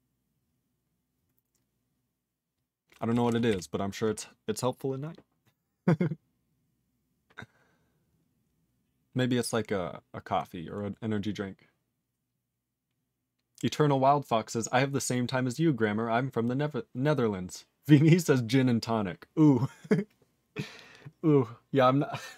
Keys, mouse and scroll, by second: 3.1 e, 3.5 e.